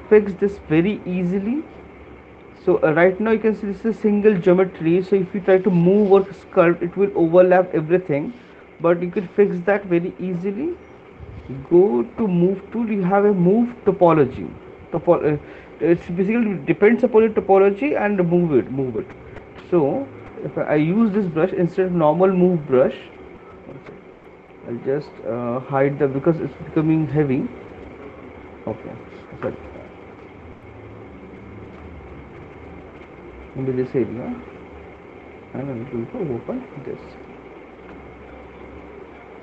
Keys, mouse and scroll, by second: 1.7 alt+click, 3.8 right click, 8.7 click, 11.1-16.2 drag, 18.5-24.0 drag, 24.4 right click, 27.0 right click, 27.0 alt+click, 28.7 click, 29.8 alt+click, 31.6 click, 34.4 right click, 34.9 alt+click, 35.1 click, 35.8 alt+click, 37.2 click, 37.6 click, 38.0 alt+click.